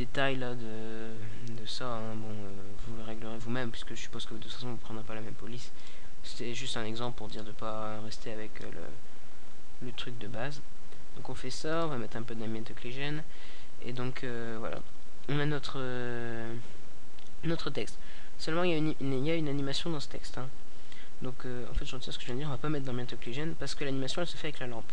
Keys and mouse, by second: 3.4-19.7 drag, 20.3-22.1 middle drag.